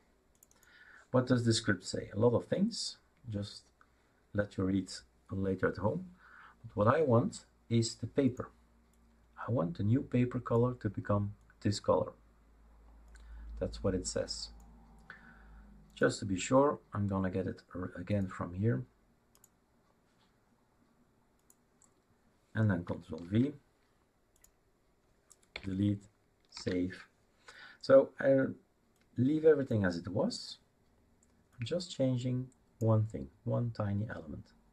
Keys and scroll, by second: 23.2 ctrl+v, 25.5 Delete, 26.5 ctrl+s.